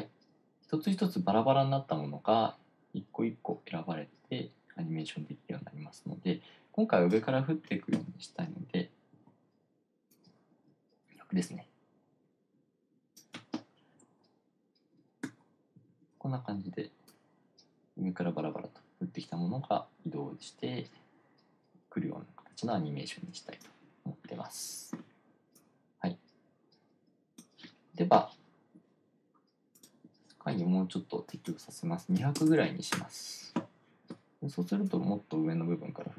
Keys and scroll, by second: 9.6 r, 16.0-16.7 typing, 32.4-33.5 typing.